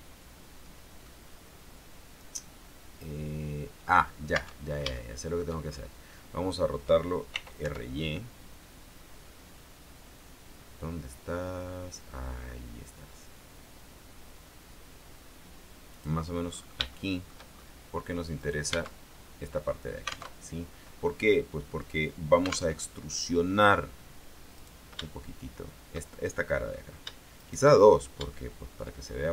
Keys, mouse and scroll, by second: 0.6-1.2 scroll down 2, 1.2-4.2 middle drag, 4.5 Tab, 5.1 shift+middle click, 6.1-7.5 scroll down 2, 7.5 r, 7.7 y, 16.1 click, 16.6-17.0 scroll up 3, 17.1 shift+middle click, 18.5 right click, 18.9 Tab, 20.5 alt+Tab, 22.9 alt+Tab, 24.7 right click, 27.5 shift+right click, 28.0 shift+scroll down 1, 28.5 shift+middle click.